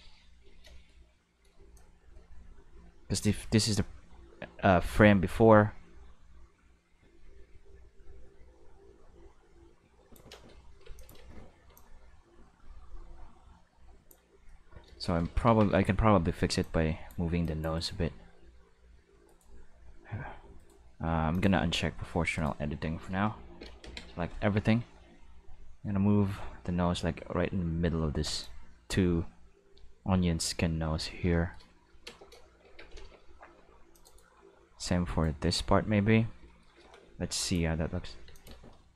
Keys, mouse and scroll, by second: 1.7-10.1 drag, 10.3 space, 10.8 space, 10.9 click, 11.1 space, 11.6 space, 11.7-14.1 drag, 14.5 middle click, 14.6 Tab, 14.7 middle drag, 15.0 middle click, 15.2 alt+a, 15.4 c, 16.6 click, 17.4 click, 17.7 right click, 18.0 g, 19.3 right click, 19.8 g, 20.5 right click, 21.3 click, 22.0 g, 22.3 right click, 23.8 ctrl+l, 24.6 g, 28.3 click, 32.6 alt+a, 32.9 c, 33.9 click, 34.0 right click, 34.3 g, 35.0 right click, 37.3 click, 37.7-38.9 typing, 38.3 click.